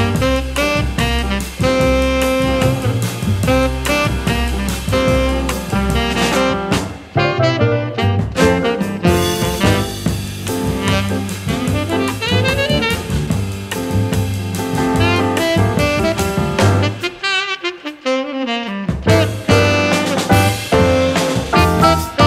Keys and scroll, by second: 0.9 a, 3.9 super+z, 19.1 e.